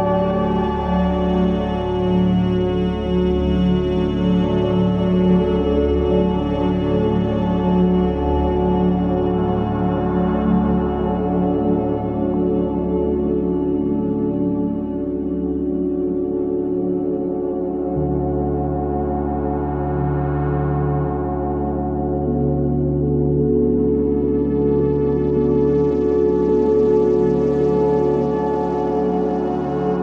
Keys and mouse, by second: 2.4 middle click, 5.9 g, 9.8 alt+z, 10.3 middle click, 11.3 click, 12.3 Tab, 12.9 click, 15.0 click, 16.6 Tab, 18.0 click, 19.5 Tab, 20.7 F4, 24.5-25.3 middle drag, 25.8 click.